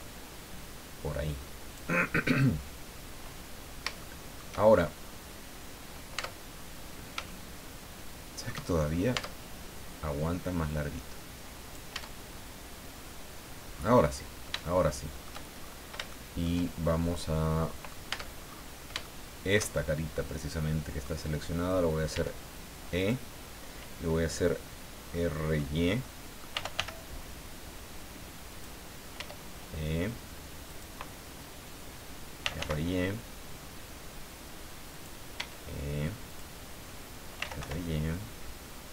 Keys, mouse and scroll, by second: 3.5-3.8 scroll down 3, 4.0 shift+middle click, 4.6-4.9 shift+scroll up 2, 5.0 scroll down 2, 6.1 Tab, 6.6 scroll down 1, 7.2-8.6 shift+drag, 8.8-9.1 shift+scroll up 1, 9.1 Tab, 10.6-11.9 drag, 11.9 Tab, 12.2-12.6 scroll down 1, 13.7-14.1 scroll up 1, 14.6 shift+middle click, 15.6-15.9 shift+scroll up 1, 16.1 shift+middle click, 16.9-18.1 shift+middle drag, 18.1 Tab, 18.3-18.7 scroll up 2, 19.0-21.2 shift+middle drag, 22.1 e, 23.0 click, 25.1 middle click, 26.0 middle click, 26.2-27.2 typing, 28.5 click, 29.1 e, 30.7 click, 32.1-33.0 typing, 34.9 click, 35.3 e, 36.2 click, 37.1-38.1 typing.